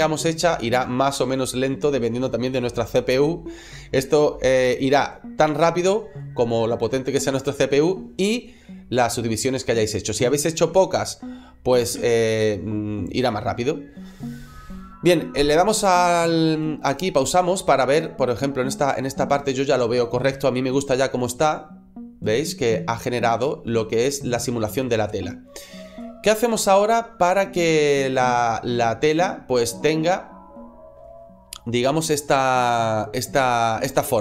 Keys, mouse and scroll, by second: 12.5 space, 17.6 middle click, 19.8-20.1 scroll up 2, 20.2 shift+middle click, 20.9 middle click, 23.7 scroll down 1, 24.0 middle click, 25.9 shift+middle click.